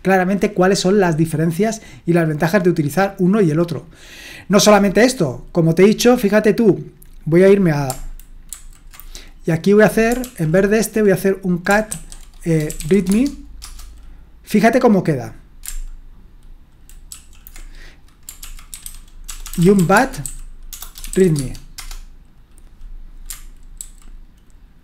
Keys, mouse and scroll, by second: 8.5 ctrl+shift+Left, 10.2 ctrl+l, 11.9 ctrl+w, 12.4-13.3 typing, 13.6 Return, 17.1 ctrl+shift+Right, 18.4 ctrl+l, 18.5-21.6 typing, 21.7 Return, 23.8 ctrl+shift+Left.